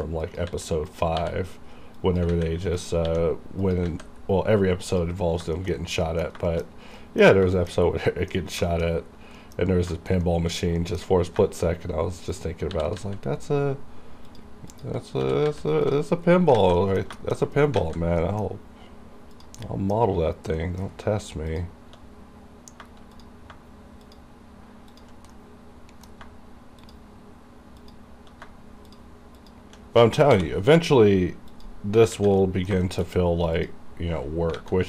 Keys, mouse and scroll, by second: 0.0-1.2 typing, 0.3 click, 1.0 click, 2.1 click, 2.4 alt+a, 2.9 click, 3.2 r, 3.7 click, 3.9 alt+a, 4.2 scroll down 1, 4.9 click, 5.3 scroll down 1, 5.7 shift+middle click, 5.9-6.5 scroll down 2, 6.1 middle click, 6.6 shift+middle click, 6.8 shift+scroll up 2, 7.1 middle click, 7.4 scroll up 1, 7.6 shift+middle click, 7.9-8.7 scroll down 2, 8.2 middle click, 8.8 shift+middle click, 9.0-9.5 scroll up 1, 9.5 middle click, 9.8 scroll down 1, 10.0 shift+middle click, 10.3 middle click, 10.6 scroll down 1, 10.9 middle click, 11.2-11.5 scroll up 1, 11.5 shift+middle click, 11.7 shift+scroll up 1, 12.4 click, 12.8 r, 13.0 z, 14.4 click, 15.3 r, 15.5 z, 15.9 click, 16.2-16.6 scroll down 1, 16.7 alt+a, 17.3 shift+middle click, 17.5-17.8 scroll up 2, 17.9 alt+a, 18.3 middle click, 19.4 click, 19.7 middle click, 19.7 middle click, 20.2-20.7 scroll up 2, 20.7 middle click, 21.6 shift+click, 21.6 shift+click, 22.3-22.9 scroll down 2, 23.2 click, 23.3 click, 24.1 shift+click, 25.4-26.9 middle drag, 26.9 shift+click, 28.9 shift+click, 29.7 shift+click, 30.4 m, 31.6 click, 32.2 alt+a, 32.5 middle click, 32.9 shift+middle click, 33.2 shift+scroll up 1, 33.6 click, 34.7 alt+a.